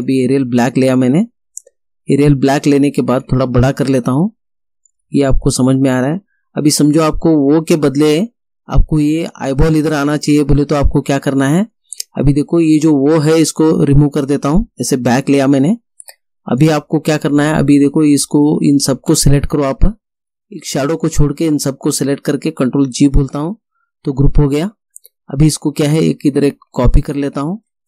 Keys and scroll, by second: 15.1 BackSpace, 23.3 ctrl+g.